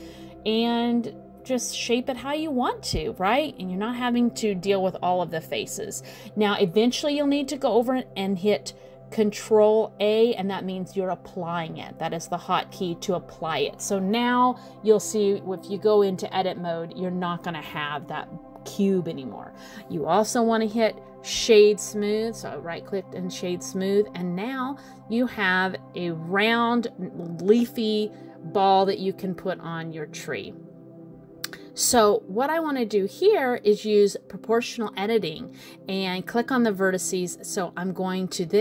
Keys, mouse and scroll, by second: 0.9 middle click, 2.8 click, 7.2 click, 10.1 ctrl+a, 11.3 middle click, 13.6-14.0 scroll up 3, 14.0 middle click, 15.5 right click, 17.4 middle click, 19.7 click, 21.6 middle click, 23.1 click, 24.0 click, 24.7 click, 25.9 click, 26.5 middle click, 27.8 middle click, 28.8 click, 32.8 click, 33.3 middle click, 34.9 g.